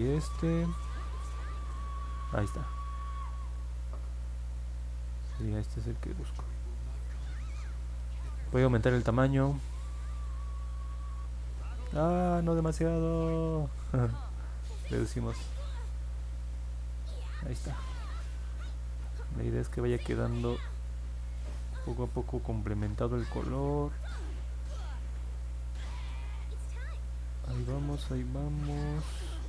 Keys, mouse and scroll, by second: 1.1-7.6 drag, 12.4 ctrl+z, 16.4-29.4 drag.